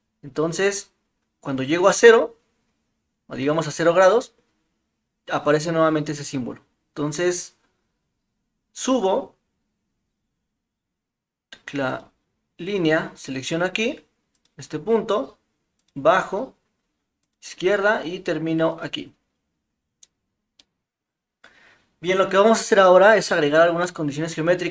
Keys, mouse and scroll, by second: 9.2 typing, 11.9 click, 13.1 click, 20.6 middle drag, 23.8-24.7 middle drag.